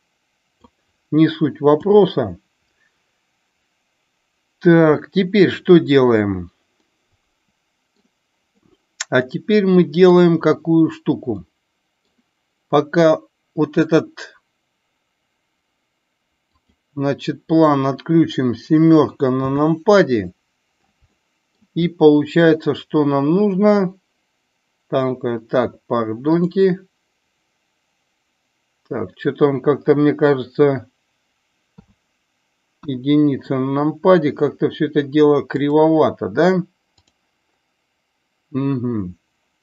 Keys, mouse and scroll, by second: 1.7 KP_7, 6.7-8.0 middle drag, 8.6-10.1 middle drag, 11.4-12.1 middle drag, 16.5 click, 19.4 KP_7, 21.0-21.5 shift+middle drag, 26.4 click, 31.6 KP_3, 32.7 KP_1, 37.0 click.